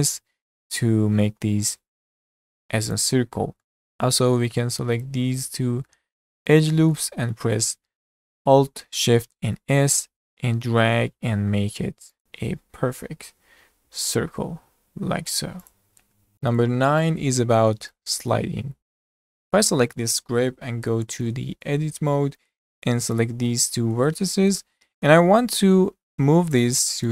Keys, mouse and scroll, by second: 3.7 middle click, 3.8 scroll up 3, 4.1 shift+middle click, 5.0 alt+shift+click, 5.4 alt+shift+click, 6.0 scroll down 3, 6.2 middle click, 7.2 scroll up 1, 7.4-9.4 shift+middle drag, 9.4 alt+shift+s, 12.9 s, 18.8 scroll up 2, 18.8-19.3 shift+middle drag, 19.3 click, 20.5 Tab, 20.9-21.3 scroll up 3, 21.3-22.8 shift+middle drag, 22.8 shift+click, 23.2 shift+click, 23.8-24.3 scroll up 1, 24.3-24.6 scroll down 1, 24.6-27.1 shift+middle drag.